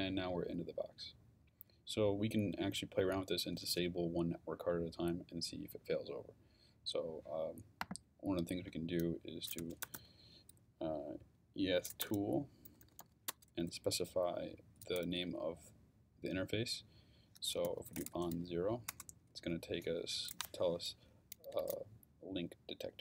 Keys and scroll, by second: 9.4-10.4 typing, 12.0 t, 12.7 o, 13.0 l, 13.3 space, 17.4-18.8 typing, 18.9 Return.